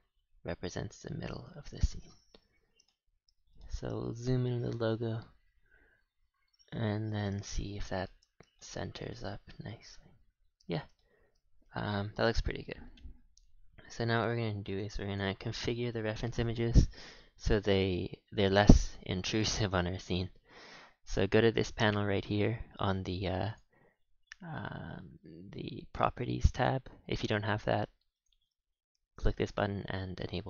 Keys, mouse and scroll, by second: 2.6-3.5 scroll up 5, 3.0 shift+middle click, 3.5-3.9 shift+middle drag, 3.9 scroll up 5, 4.2-4.8 shift+middle drag, 4.8 g, 7.4 shift+middle click, 8.1-8.5 scroll down 4, 8.5-10.7 shift+middle drag, 10.6-10.9 scroll down 6, 10.9-11.5 shift+middle drag, 11.5 scroll, 11.7-13.2 scroll down 1, 13.2-13.9 scroll down 4, 13.9 click, 15.0 click, 17.3 scroll up 5, 17.8-20.6 scroll down 3, 21.0 click, 23.5-30.4 drag.